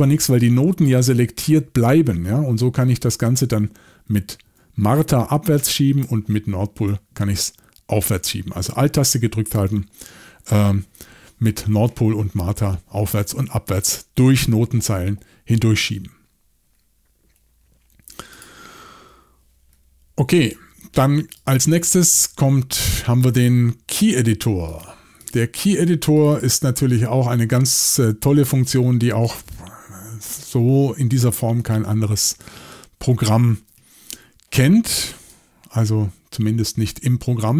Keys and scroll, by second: 2.5 alt+n, 4.1 alt+m, 4.5 alt+m, 5.6 alt+n, 6.0 alt+n.